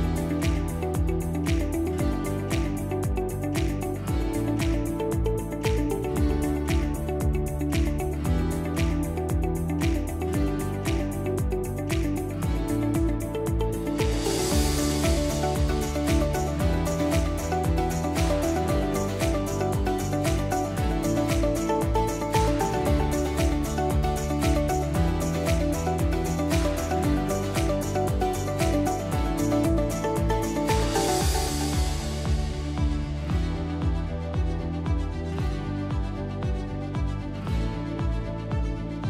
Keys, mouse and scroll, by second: 2.9 click, 11.6 click, 14.6 click, 15.5 click, 22.4 click, 23.2-23.8 typing, 24.7 Return, 27.5 click, 28.9 click, 30.4 click, 38.0 click.